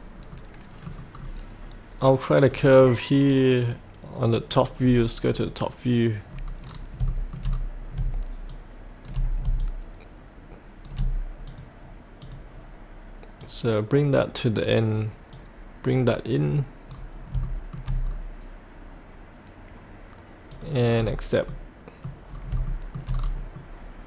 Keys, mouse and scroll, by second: 0.3 middle click, 1.1-2.4 scroll down 1, 2.4 click, 4.8-5.3 scroll down 1, 5.3 click, 6.3-7.0 scroll down 1, 7.1 shift+middle click, 7.4 scroll, 7.4-8.0 scroll down 1, 9.6 shift+click, 11.4-13.3 drag, 14.3-17.3 drag, 17.4 shift+middle click, 18.1-20.5 scroll down 1, 20.5 click, 21.0-21.4 scroll up 1, 21.4 middle click, 22.0-22.3 scroll up 1, 22.6 shift+middle click, 23.1-23.5 scroll up 1, 23.5 middle click.